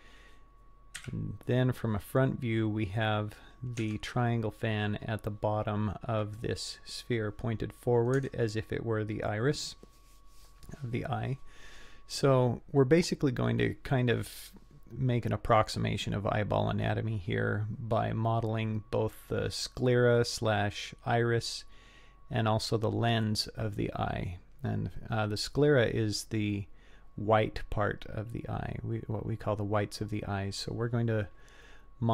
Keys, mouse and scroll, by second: 1.4 KP_1, 2.2-3.8 scroll up 3, 3.8 Tab, 4.5-5.1 scroll up 4, 7.5-7.9 scroll down 4, 8.2 Tab.